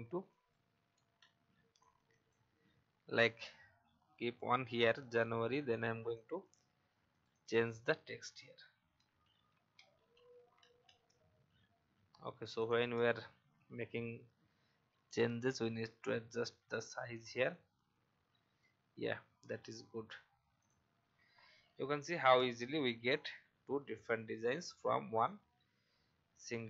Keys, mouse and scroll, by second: 0.2 click, 1.2 Delete, 1.7-4.6 drag, 4.9 alt+click, 6.4 click, 9.1-11.3 typing, 12.5 click, 13.1 alt+scroll up 1, 15.1-17.5 alt+shift+drag, 18.9 Down, 20.5 click, 21.5 alt+scroll down 1, 22.5 alt+scroll up 1, 23.1-26.6 drag.